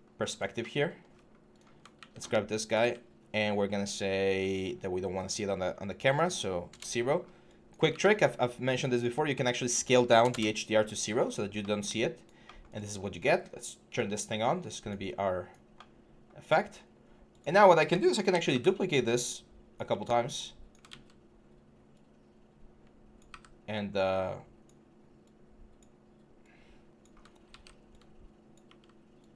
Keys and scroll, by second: 1.8 ctrl+a, 2.6 ctrl+a, 6.5 0, 7.7 ctrl+a, 10.7 Return, 18.1 ctrl+d, 20.7 ctrl+z, 23.1 w, 27.2 ctrl+d, 27.3 ctrl+s.